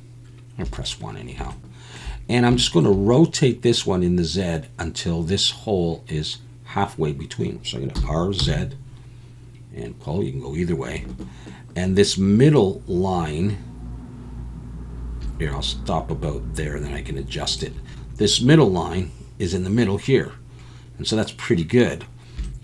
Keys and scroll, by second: 0.6 1, 8.0 r, 8.4 z.